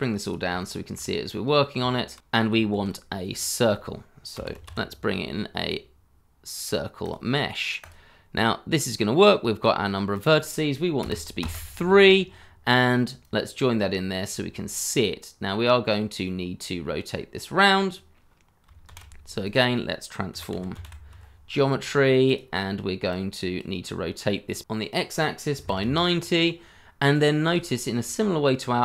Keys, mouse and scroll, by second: 0.5 shift+middle click, 1.0 scroll up 1, 1.9 shift+middle click, 2.2-2.5 scroll up 1, 2.7 shift+a, 4.4-5.1 typing, 11.0 3, 11.4 Return, 15.5 middle click, 18.8 shift+a, 20.3-21.3 typing, 22.2 double click, 25.5 KP_9, 25.6 0, 25.8 Return, 27.1 scroll up 1, 27.7-28.0 scroll up 1, 28.1 shift+middle click.